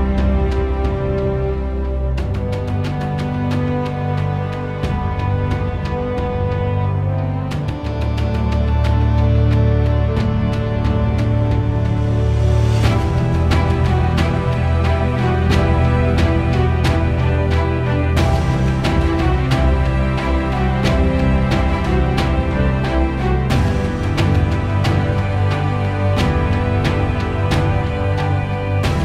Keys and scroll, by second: 5.6 Escape, 12.5 p, 21.5 0, 21.8 ,, 22.9 5, 23.3 Return.